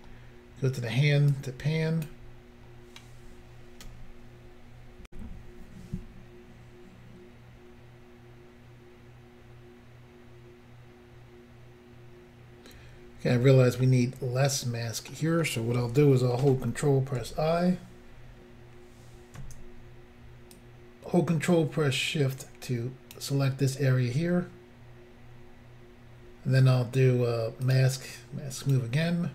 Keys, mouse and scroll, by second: 1.3 click, 5.1 Insert, 13.8 middle click, 17.2 ctrl+i, 20.6 ctrl+click, 27.7 click, 27.8 click, 28.6 click, 28.7 click.